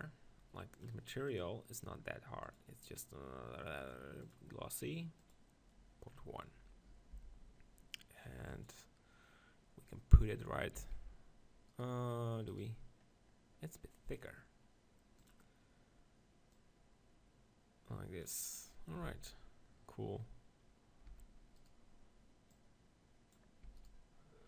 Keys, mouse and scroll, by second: 1.4-4.3 drag, 5.3-7.0 drag, 7.0 middle click, 7.3 g, 8.7-10.5 drag, 10.8 s, 11.8-16.7 right drag, 16.7-18.4 drag, 18.6-21.6 middle drag, 19.0 z, 21.1 Tab, 21.6-24.4 drag, 22.5 right click, 23.7 Tab, 23.8-24.4 right drag.